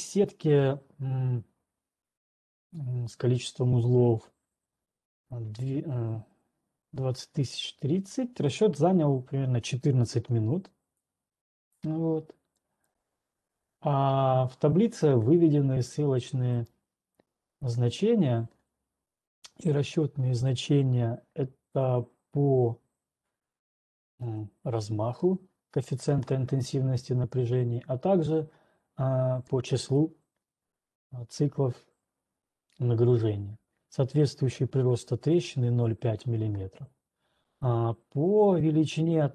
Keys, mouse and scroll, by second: 12.0 click, 13.0 click, 16.5 click, 24.1 click, 24.7 ctrl+2, 24.7 right click, 26.1 ctrl+2, 26.1 click, 29.5 right click, 36.6 ctrl+right click, 37.6 typing.